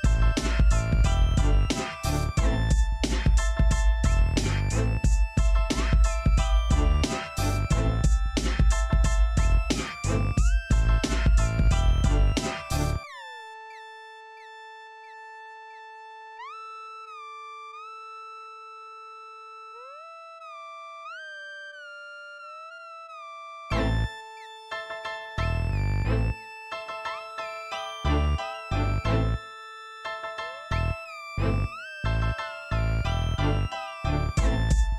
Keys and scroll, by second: 0.0-2.6 typing, 7.3 Escape, 11.6-12.4 typing, 13.4-16.3 typing, 13.6 Return, 22.4-23.2 typing, 24.4-25.4 typing, 32.1-33.5 typing.